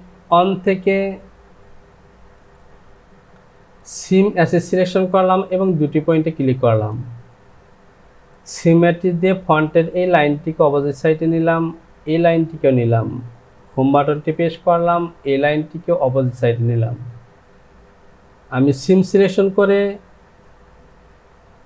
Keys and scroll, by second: 14.1 Home.